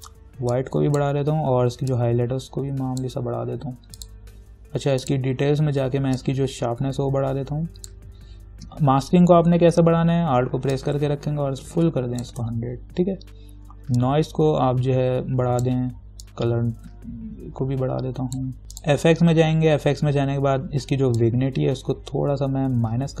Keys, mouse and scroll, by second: 11.1-18.6 alt+drag, 19.0 click, 21.4-23.2 drag.